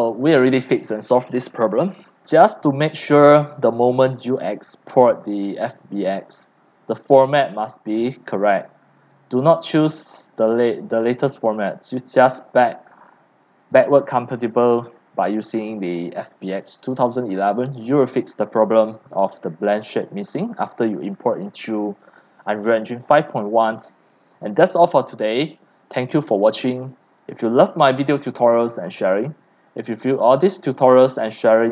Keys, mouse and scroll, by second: 7.6-10.1 drag, 10.1-11.2 middle drag, 10.1-10.8 scroll down 2, 10.8-11.2 scroll down 1, 11.2-14.4 scroll up 2, 14.4 scroll up 1, 17.5-23.1 drag, 23.4-25.0 drag, 25.2-26.8 drag, 26.8-30.4 middle drag, 30.4-31.7 drag.